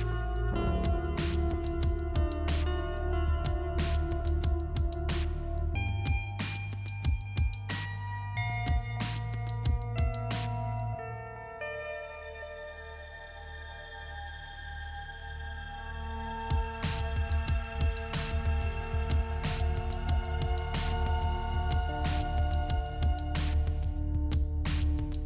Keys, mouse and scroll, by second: 0.1 click, 1.4 click, 5.2-6.3 scroll up 2, 6.3 p, 6.7-7.1 scroll down 1, 10.1 click, 11.9 click, 14.7 click, 16.5 click, 18.7 click, 21.4 click, 22.9 click.